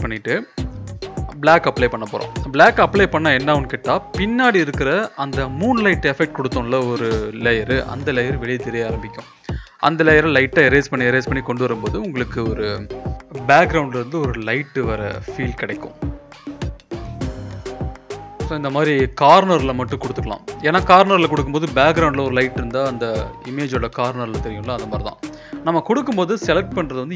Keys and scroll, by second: 3.9 [, 4.1 [, 4.3 [, 6.2 [, 6.4 [.